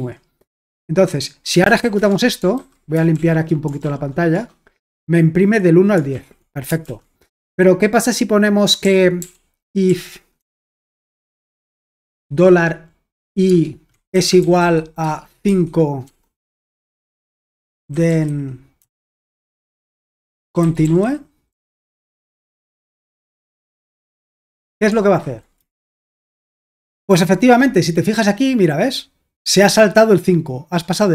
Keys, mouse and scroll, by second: 0.0 j, 1.4-2.3 typing, 2.6 super+h, 3.1 ctrl+l, 3.8 ctrl+p, 4.3 Return, 6.1 ctrl+l, 6.9 super+l, 7.4 j, 8.8-24.4 typing, 23.4 Escape, 24.6 Return, 25.2 super+h, 25.8 ctrl+p, 26.0 Return, 29.0-31.1 drag.